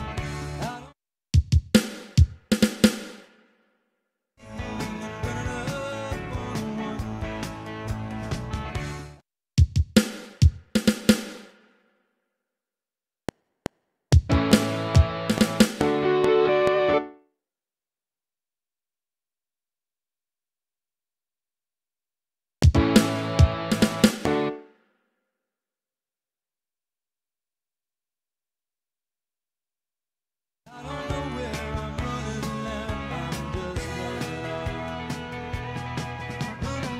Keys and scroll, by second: 0.6 space, 3.9 ctrl+shift+Left, 4.4 space, 8.9 space, 11.9 Right, 13.1 F7, 16.9 space, 20.6 Down, 22.5 space, 24.4 space, 30.7 space.